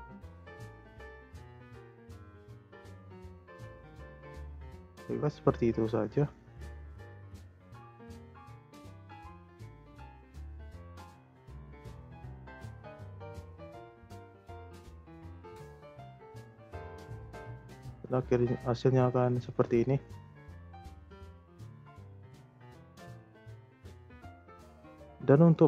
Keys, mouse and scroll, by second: 2.8 click, 3.5-4.7 drag, 6.8 Delete, 7.7 ctrl+z, 8.3 click, 8.7 click, 9.2-11.0 shift+middle drag, 11.0 space, 12.5 space, 13.0 click, 14.1 g, 16.3-16.6 drag, 16.6 space, 18.2 space, 19.0-20.4 drag, 20.4 space, 22.0 space, 22.6-24.4 drag, 24.6 a.